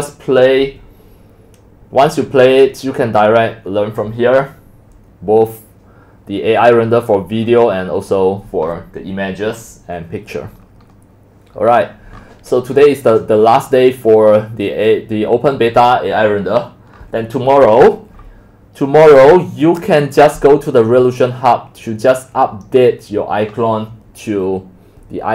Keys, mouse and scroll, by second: 4.3-4.7 middle drag, 4.3-4.8 scroll down 6, 4.8-5.7 scroll up 6, 5.7-6.6 scroll down 1, 6.6-7.4 scroll down 1, 7.4-8.1 scroll up 3, 8.1-10.0 scroll down 1, 10.0-11.6 scroll down 8, 11.6-12.5 scroll up 3, 12.5-12.8 scroll down 1, 12.8-13.8 scroll up 27, 13.8-15.3 scroll down 16, 15.3-16.2 middle drag, 15.3 scroll, 16.2-16.5 scroll down 1, 16.5-19.1 middle drag, 19.1 scroll down 6, 20.3-25.3 drag.